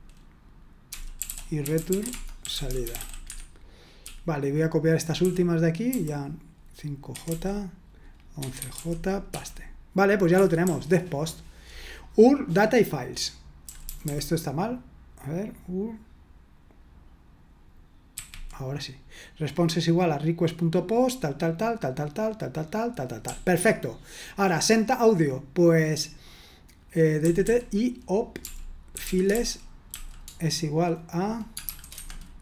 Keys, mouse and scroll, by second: 0.6-9.3 typing, 10.3 Escape, 10.6-11.7 typing, 13.6-14.0 typing, 18.1 typing, 23.2-24.4 typing, 27.2-30.4 typing, 31.6 shift+_, 31.6 =, 31.9 Escape.